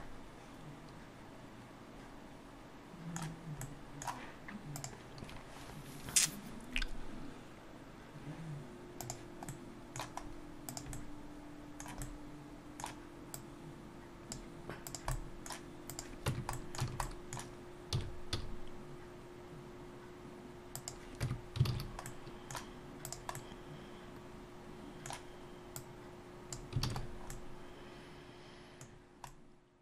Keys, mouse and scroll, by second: 3.6 middle click, 9.5 middle click, 10.3 scroll up 2, 10.7 click, 11.0 middle click, 12.2 middle click, 13.4 click, 15.0 click, 15.1 middle click, 15.9 click, 16.3 Tab, 16.6 middle click, 16.8 a, 17.1 middle click, 18.0 s, 21.2 Tab, 21.7 alt+a, 22.1 middle click, 23.1 click, 23.4 middle click, 25.8 click, 26.9 alt+a, 27.1-27.6 scroll down 2, 27.3 middle click, 28.9-29.4 scroll down 2, 29.3 middle click.